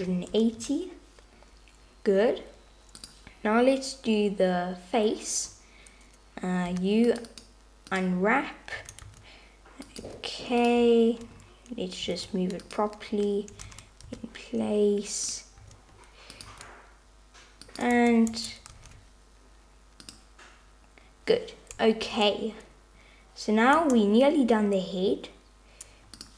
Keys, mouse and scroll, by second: 3.0 click, 6.8 u, 7.3 click, 8.8 a, 9.1 s, 10.1 g, 12.1 s, 13.1 h, 13.7 super+z, 14.1 g, 15.6 s, 16.5 g, 17.9 Tab, 18.3 Tab, 18.7 r, 22.1 Tab, 23.8 Tab.